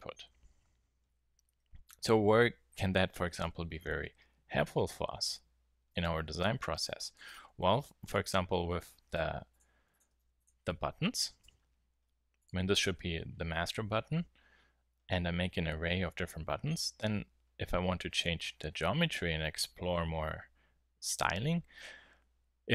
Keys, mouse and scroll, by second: 6.4 super+z, 6.7 super+z, 7.0 super+z, 7.3 super+z, 7.6 super+z, 7.8 super+z, 8.1 super+z, 8.7 super+z, 9.5-9.9 drag, 10.1 x, 11.4 alt+h, 12.4-14.1 drag.